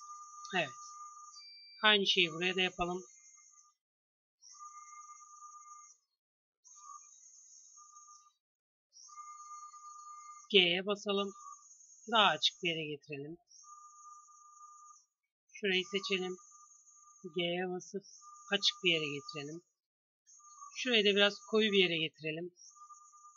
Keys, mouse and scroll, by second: 0.9 Tab, 1.6 a, 1.8 c, 8.5-10.3 drag, 10.3 g, 12.6 a, 13.2 c, 16.9 g, 19.9 a, 20.6 c.